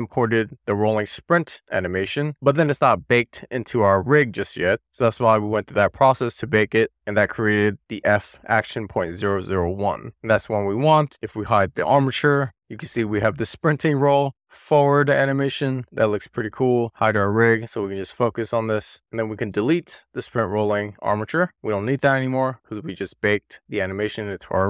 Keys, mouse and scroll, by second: 11.1 click, 12.6-17.2 middle drag, 18.9 click, 19.9 x, 21.8 click, 22.7 click.